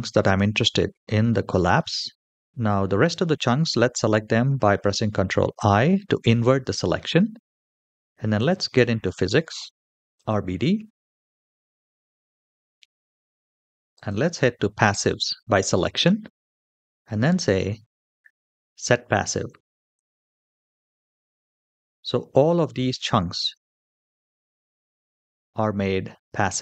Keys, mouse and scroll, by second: 1.6 middle click, 5.4 ctrl+i, 8.2 click, 10.0 click, 11.0-11.6 scroll down 1, 11.6-12.7 scroll down 3, 12.7 scroll down 2, 13.8 click, 19.8 click, 21.6-23.4 middle drag, 23.8-24.4 scroll up 1, 24.4-26.6 middle drag, 24.4 scroll up 3.